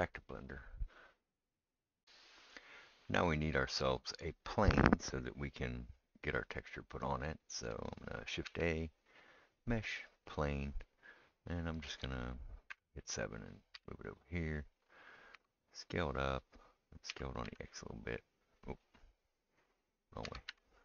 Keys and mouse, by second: 2.1-18.7 right drag, 8.5 shift+a, 12.7 KP_7, 13.7 g, 15.3 s, 17.1 s, 18.7-20.8 middle drag, 20.2 s.